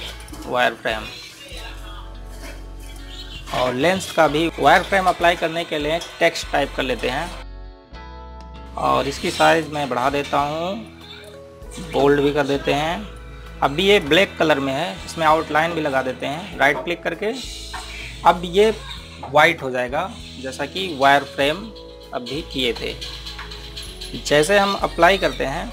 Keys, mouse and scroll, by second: 7.6 Caps_Lock, 7.6 click, 7.8-8.9 typing, 10.2 click, 13.2-13.6 scroll down 1, 14.0 click, 15.1-16.6 scroll up 1, 16.9 right click.